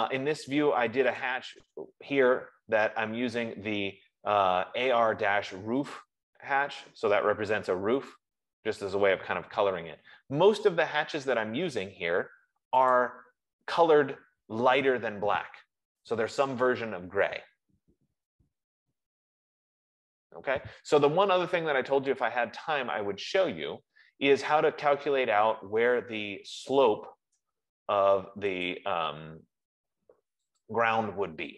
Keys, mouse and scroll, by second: 1.7-6.6 drag, 7.0 F15, 13.2-18.4 drag, 29.1 click, 31.0 click.